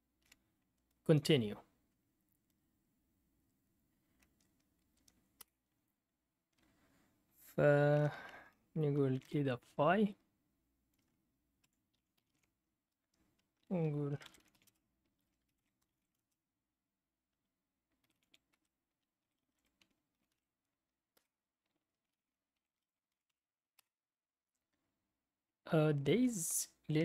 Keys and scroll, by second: 0.0-0.7 typing, 5.4 Return, 8.8-9.7 typing, 11.6 Escape, 11.6-12.8 typing, 13.8-16.5 typing, 17.7-24.4 typing.